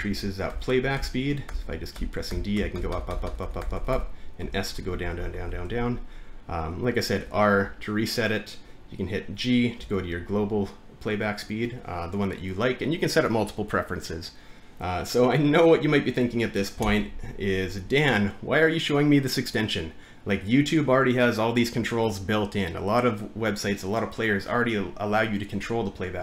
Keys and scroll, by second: 0.0-6.2 typing, 9.8 g, 11.7-12.6 typing, 16.8 r.